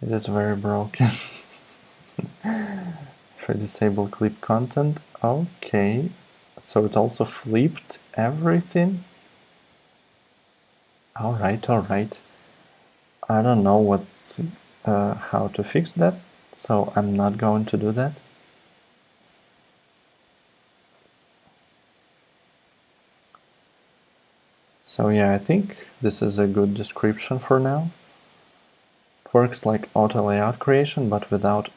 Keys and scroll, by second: 1.1 super+z, 9.7 super+z, 10.1 super+z, 21.6 super+Tab.